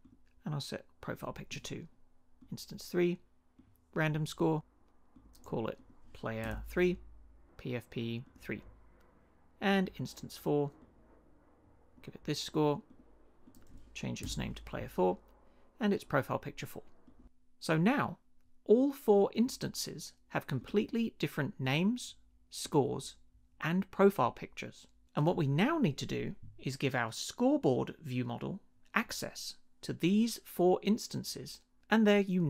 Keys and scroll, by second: 6.4 BackSpace, 6.5 3, 14.2 BackSpace, 14.3 4.